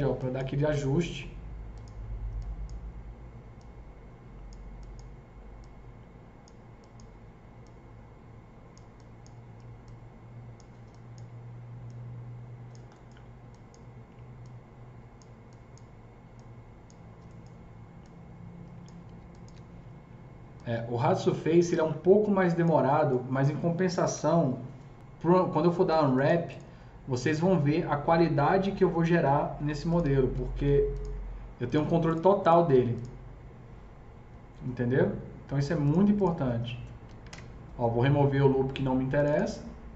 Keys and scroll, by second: 24.1 KP_0, 30.1 alt+c, 30.6 s, 37.2 ctrl+BackSpace.